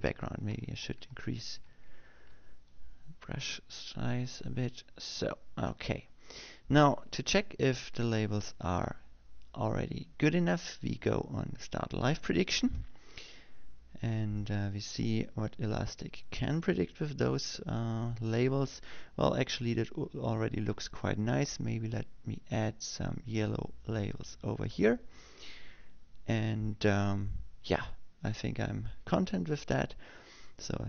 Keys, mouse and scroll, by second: 2.3 m, 4.5-7.9 drag, 13.3 click, 24.3-26.5 drag.